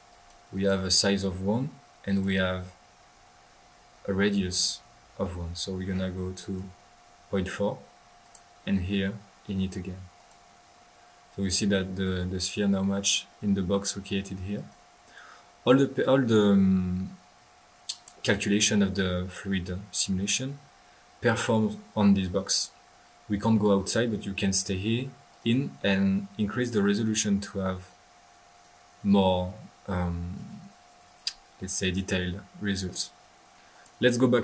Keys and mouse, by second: 0.1-0.4 drag, 0.6 drag, 0.8-1.5 typing, 2.1 click, 5.2-6.7 middle drag, 6.5-7.6 typing, 8.2 drag, 10.1 click, 10.9 middle click, 13.1 middle drag, 13.3 middle drag, 14.4-15.1 typing, 14.5-15.1 drag, 15.3 middle click, 17.3 middle click, 17.9 click, 19.3 middle click, 20.3-21.0 typing, 25.3 click, 25.9-26.5 middle drag, 26.9-28.0 drag, 28.5 click, 28.8 drag, 32.9 middle click, 33.7 drag.